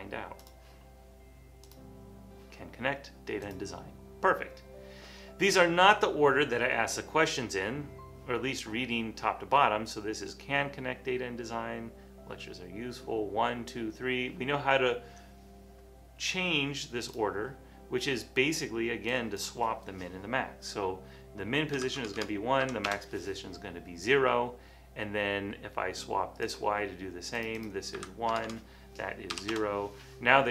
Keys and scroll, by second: 21.9 1, 22.0 Tab, 22.2 Tab, 22.7 0, 22.9 Return, 28.1 1, 28.4 Tab, 28.5 Tab, 29.4 0, 29.6 Return.